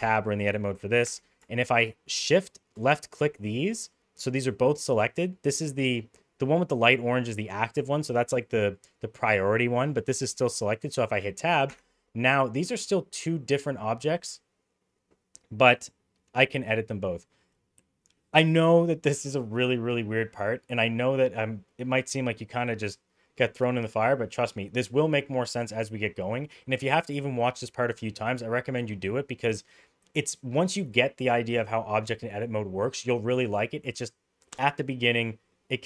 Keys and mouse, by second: 1.0 Tab, 3.6 middle drag, 4.8 middle click, 9.6 middle drag, 10.4 middle drag, 11.6 Tab.